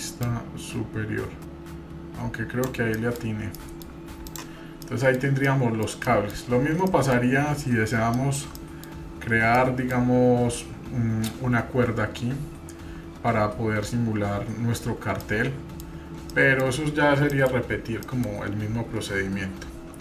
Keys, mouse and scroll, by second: 0.2 click, 3.0 middle drag, 3.2-3.6 scroll down 2, 3.6 middle drag, 3.6 scroll up 1, 4.2 drag, 4.7-5.5 scroll down 3, 4.8 middle click, 5.5-5.9 middle drag, 6.1-6.4 shift+middle drag, 6.5 scroll up 1, 6.9 shift+middle drag, 7.6-8.0 scroll up 2, 8.1-8.5 shift+middle drag, 8.6 middle click, 9.2 scroll up 1, 9.6-10.8 middle drag, 12.2 scroll down 2, 12.4 scroll up 1, 15.2-15.8 middle drag, 15.9 scroll down 1, 16.3-16.8 shift+middle drag, 17.3 middle click, 17.6-18.3 scroll up 3, 18.0 middle click, 19.5-19.9 scroll down 2.